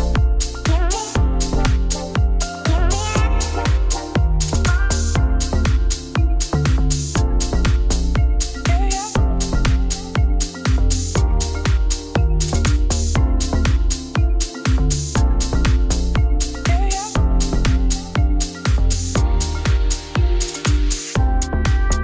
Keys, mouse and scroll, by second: 2.3 click, 3.1 scroll up 1, 3.9 click, 4.1 g, 4.8 click, 5.2 g, 7.7 click, 8.1-9.9 shift+click, 10.9 ctrl+click, 12.0 ctrl+p, 12.5 click, 12.7 click, 12.8 g, 13.6 scroll up 2, 14.3 click, 14.4 g, 14.8 shift+middle click, 15.2 shift+click, 15.5 shift+click, 17.4 ctrl+p, 17.6 click, 17.7 click, 17.9 shift+click, 18.3 click, 18.5 shift+click, 19.6 ctrl+p, 19.7 scroll down 2, 20.1 click, 20.3 click, 20.5 g, 21.1 click, 21.4 click.